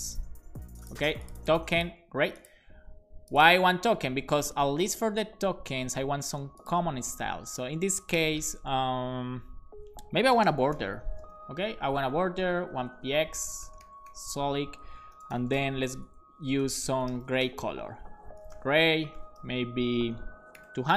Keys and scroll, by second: 0.0-0.2 typing, 8.3 Return, 10.0-11.5 typing, 12.6-18.1 typing, 19.2 BackSpace, 20.6 0, 20.8 0.